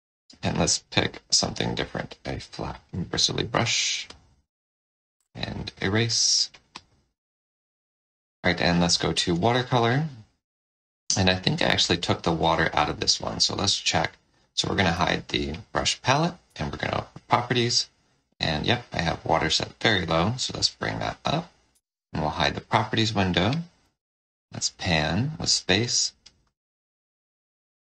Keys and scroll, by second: 7.2 5, 8.6 shift+w, 14.9 F8, 16.4 F4, 21.6 F4, 23.7 space.